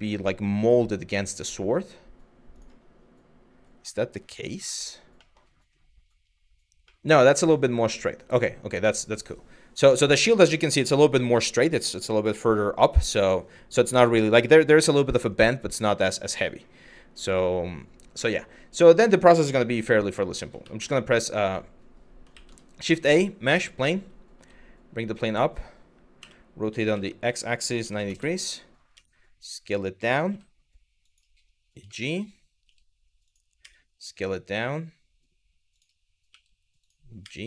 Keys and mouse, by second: 17.9 shift+middle click, 20.4 shift+s, 22.0 shift+a, 24.0 g, 24.6 click, 25.8 r, 27.5 KP_9, 27.6 KP_0, 27.8 KP_Enter, 28.6 s, 29.8 click, 29.9 g, 30.7 click, 31.6 shift+middle click, 32.3 g, 33.2 s, 35.4 click, 35.9 g, 36.5 click, 36.9 s.